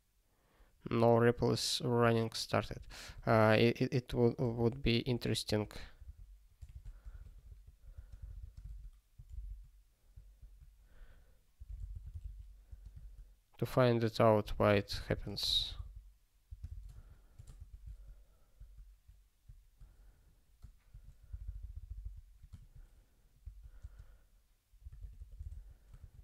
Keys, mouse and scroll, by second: 2.6 ctrl+g, 3.1 space, 4.6-8.7 typing, 9.3 ctrl+k, 10.3-12.7 typing, 12.9 ctrl+k, 14.3-17.3 typing, 17.5 ctrl+k, 18.5 ~, 21.3 alt+b, 21.5 alt+b, 21.6 alt+b, 21.7 alt+b, 21.8 alt+b, 22.0 alt+b, 22.6 ~, 23.4 ctrl+e, 23.7-26.0 typing.